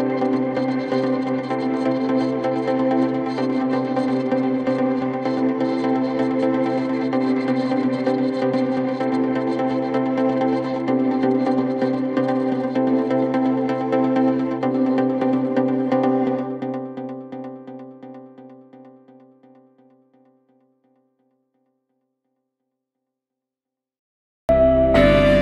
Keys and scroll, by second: 15.9 Insert, 17.3 Delete, 18.3 shift+F2.